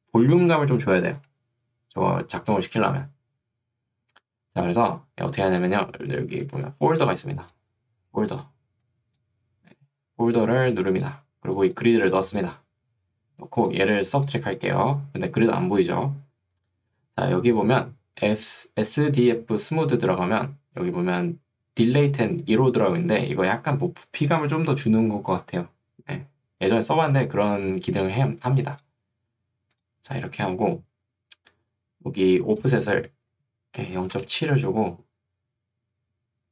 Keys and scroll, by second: 10.1 Escape, 34.3 Return.